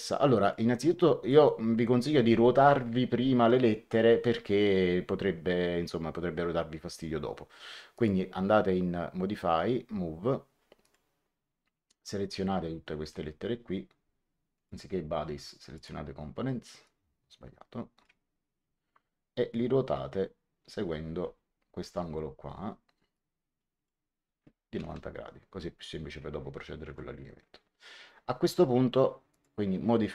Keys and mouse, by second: 0.3 click, 1.4 middle click, 7.8 click, 10.7 click, 12.0 click, 14.5 click, 15.7 click, 16.8 click, 23.0 click, 24.7 KP_9, 24.8 KP_0, 26.8 Return, 29.2 click.